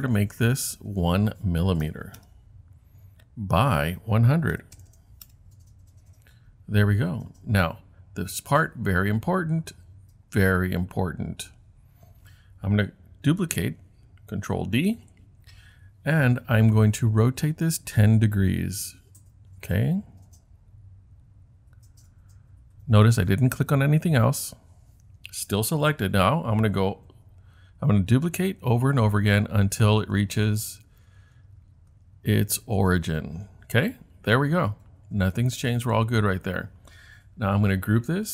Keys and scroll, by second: 2.2 Return, 4.3-5.4 typing, 14.9 super+d, 28.6 super+d, 28.9 super+d.